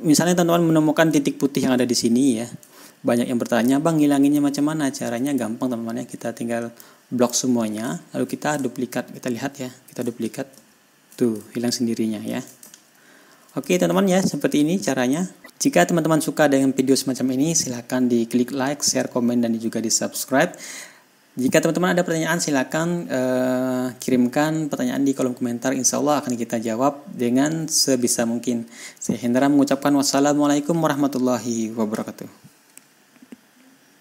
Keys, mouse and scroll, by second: 1.7-2.3 ctrl+scroll up 2, 2.3-3.5 ctrl+scroll down 4, 3.9 ctrl+scroll down 2, 4.9 ctrl+scroll down 2, 6.3-7.3 ctrl+scroll down 2, 7.3 click, 8.4 ctrl+scroll up 2, 8.7-9.2 ctrl+scroll down 1, 9.2 ctrl+scroll up 1, 9.4-10.0 ctrl+scroll down 1, 11.0 ctrl+d, 12.7 ctrl+d, 13.1-13.8 ctrl+scroll down 1, 13.8-14.5 ctrl+scroll down 1, 14.1 ctrl+click, 14.5 ctrl+scroll up 1, 14.8-15.4 ctrl+scroll down 1.